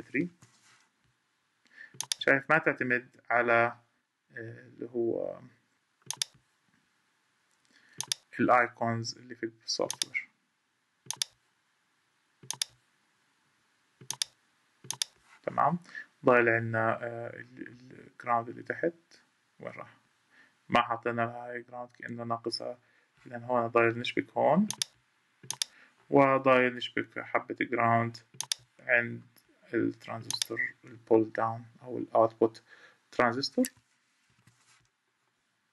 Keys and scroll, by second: 0.0 F3, 26.2 Escape, 34.0 F3.